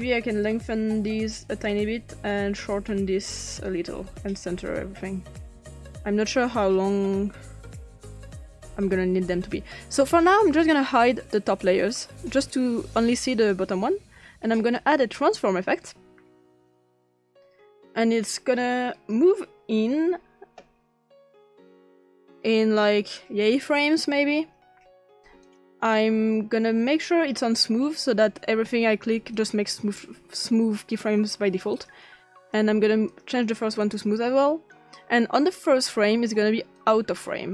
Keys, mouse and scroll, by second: 1.0 click, 2.7 click, 3.6-6.0 drag, 6.7-8.8 drag, 10.5 click, 11.2 click, 13.2 click, 14.1 click, 14.7 click, 15.8-16.6 drag, 17.2 click, 19.0 click, 21.6 click, 25.4 click, 29.4 click, 31.8 click, 32.4 click, 33.1 click, 33.8 click, 36.8-37.5 drag.